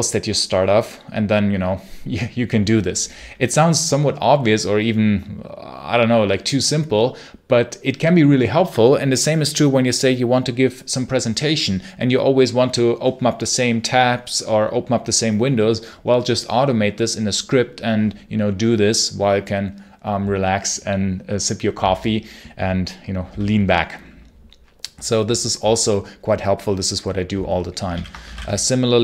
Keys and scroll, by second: 27.8 ctrl+l, 28.1 j, 28.2 space.